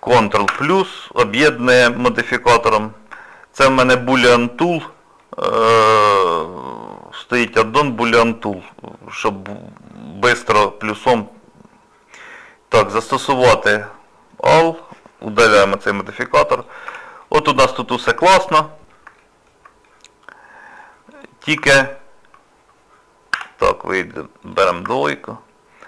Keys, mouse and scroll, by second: 0.5 ctrl+KP_Add, 5.2 shift+middle click, 5.9 middle click, 13.1 click, 14.7 click, 15.6 Delete, 15.9 scroll up 2, 16.5 click, 16.9 Tab, 17.2 middle click, 17.9 scroll up 2, 18.2 scroll down 1, 18.2-18.8 scroll up 3, 19.2 shift+middle click, 19.8 scroll down 1, 21.1 click, 21.7 alt+click, 23.3 2, 24.4 click, 25.0 alt+click.